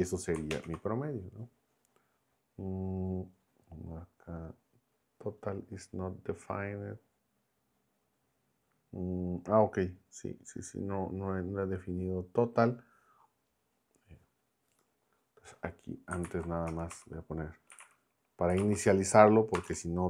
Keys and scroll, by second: 0.5 ctrl+Return, 16.3 super+Left, 16.7 Return, 16.9 Up, 17.5-20.0 typing.